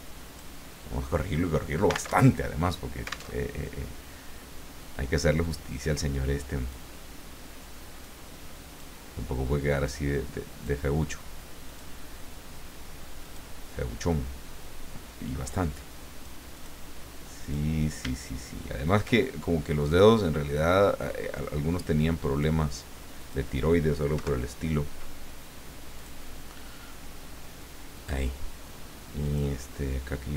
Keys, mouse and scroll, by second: 2.2 alt+Tab, 3.3 alt+Tab, 5.4-6.9 drag, 8.0 click, 9.7-10.9 drag, 11.7 click, 13.2 click, 15.5-16.5 drag, 17.4 click, 18.8 shift+click, 19.2-22.6 shift+drag, 23.2 click, 24.1 Delete, 25.9 click, 27.9 click, 29.2 click.